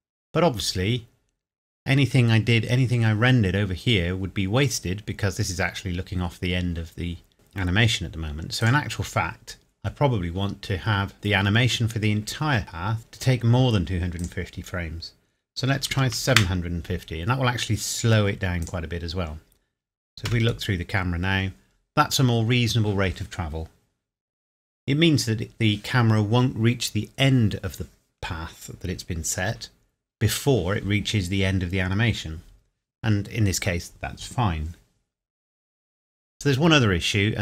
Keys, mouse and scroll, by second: 7.3 click, 14.2 click, 15.8 KP_7, 15.9 KP_5, 16.0 KP_0, 16.3 KP_Enter, 17.2 scroll up 1, 18.6 click, 20.2 KP_0.